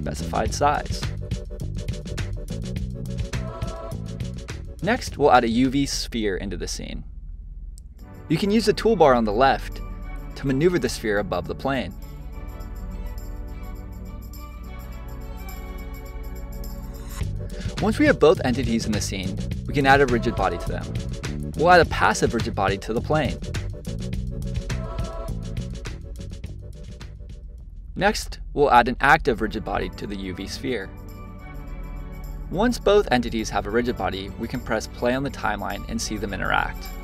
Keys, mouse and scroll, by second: 1.6 click, 3.2-6.4 drag, 7.6-10.3 middle drag, 10.3-11.9 drag, 14.7 click, 15.2-15.6 scroll down 2, 15.6-17.2 middle drag, 17.2 click, 18.8-22.0 drag, 25.5 click, 26.8-29.9 drag, 31.9 click, 35.1-36.6 drag, 36.6 space.